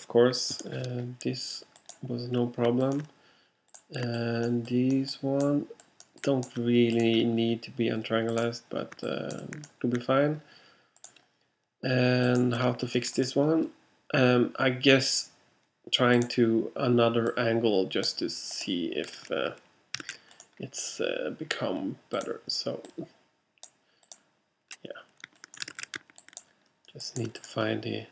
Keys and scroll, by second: 20.5 super+z, 25.8 alt+super+z.